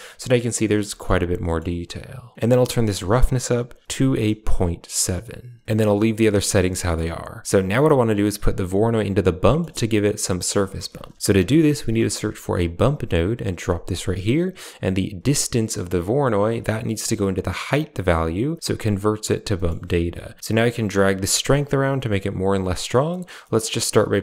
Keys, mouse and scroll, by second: 0.8 shift+middle click, 1.3 middle click, 2.6-4.9 drag, 6.6 middle click, 7.1 click, 9.3 middle click, 10.3 middle click, 10.8 shift+a, 13.8 click, 16.9-17.8 drag, 19.4 middle click, 20.4-22.6 drag, 22.9 middle click, 23.3 middle click.